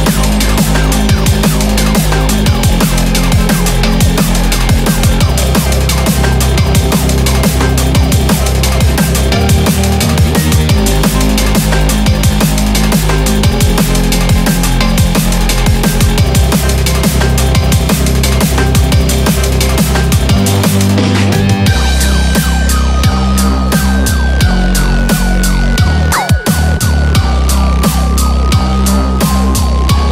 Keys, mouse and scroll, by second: 9.1 right click, 9.5 scroll down 4, 9.9 shift+middle click, 10.2 scroll up 2, 10.7 shift+middle click, 12.1 ctrl+middle click, 14.3 shift+click, 17.0 scroll up 5, 17.5 shift+middle click, 19.2-19.7 scroll down 7, 19.9 middle click, 22.2 KP_7, 22.8 scroll down 2, 23.0 shift+middle click, 23.4 scroll up 2, 24.0 ctrl+click, 24.6 ctrl+click, 25.0 ctrl+click, 25.4 ctrl+click, 25.8 ctrl+click, 26.3 ctrl+click, 26.6 ctrl+click, 27.0 ctrl+click, 27.2 ctrl+click, 27.5 ctrl+click, 27.9 ctrl+click, 28.3 scroll up 3, 28.5 scroll down 4, 28.8 middle click.